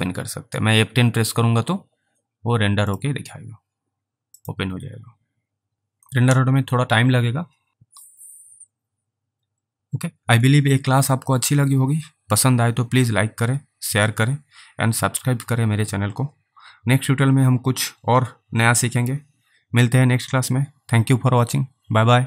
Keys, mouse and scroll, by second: 3.0 click, 5.7 F10, 9.8 double click.